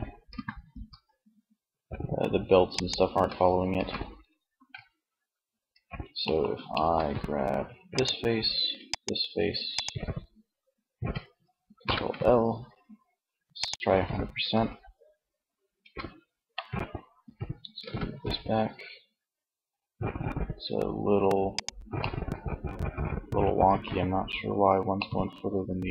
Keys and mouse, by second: 2.3 ctrl+z, 2.9 Tab, 3.7 a, 7.1-8.7 drag, 8.9-10.6 drag, 11.1 ctrl+l, 13.4 Tab, 14.9 Tab, 16.2 r, 21.1-22.3 middle drag.